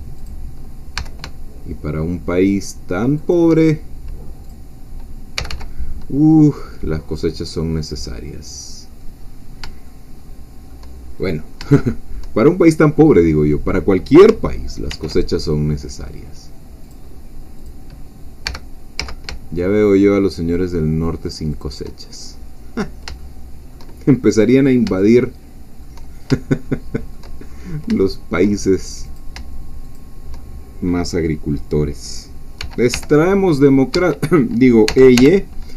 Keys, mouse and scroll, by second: 0.3 shift+click, 1.0 g, 3.2 shift+click, 4.4 click, 5.4 g, 7.9 click, 8.3-8.7 scroll down 2, 9.3-9.8 scroll down 2, 9.8-11.2 shift+middle drag, 11.2-11.5 shift+scroll up 2, 11.8 shift+middle click, 12.5-13.2 shift+scroll up 4, 14.9 ctrl+r, 15.4 ctrl+click, 16.8 click, 17.7 click, 18.4 g, 19.0 z, 21.5 shift+click, 22.0-23.0 shift+scroll down 3, 23.2-24.3 shift+drag, 25.0 shift+click, 25.3 shift+middle click, 26.6 shift+middle click, 27.4-27.9 shift+scroll up 1, 28.0 shift+middle click, 29.0 click, 30.0 shift+click, 32.6 g, 32.9 y, 33.9 Escape, 34.9 e, 35.2 y.